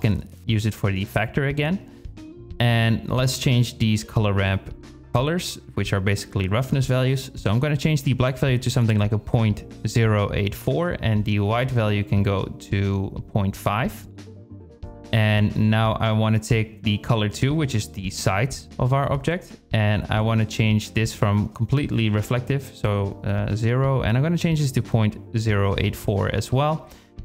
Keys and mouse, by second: 0.3 shift+drag, 0.5 shift+middle click, 0.6-1.2 drag, 2.5 shift+click, 5.2 click, 5.7 click, 17.0 shift+click, 18.0-18.9 middle drag, 18.4 click, 21.9 click, 26.1 drag.